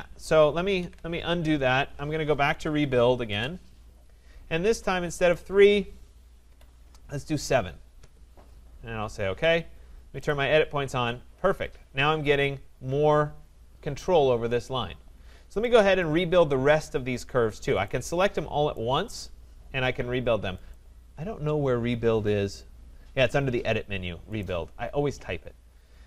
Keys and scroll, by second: 0.8 ctrl+z, 3.2 Return.